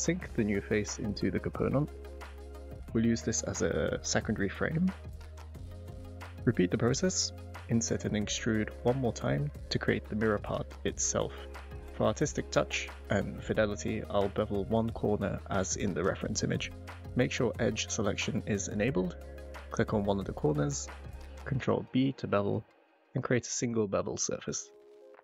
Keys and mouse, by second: 3.2 click, 6.0 i, 7.9 click, 8.6 e, 10.0 click, 13.8-15.9 middle drag, 20.0 click, 21.0 ctrl+e, 23.9-25.2 middle drag.